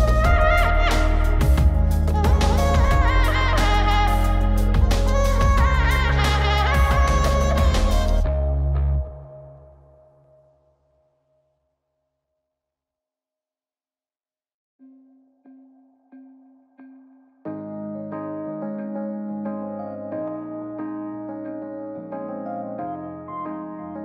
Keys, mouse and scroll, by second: 3.3 click, 4.5-6.4 drag, 7.3 KP_0, 8.9 scroll down 2, 9.6 click, 12.8 click, 22.3-23.7 drag.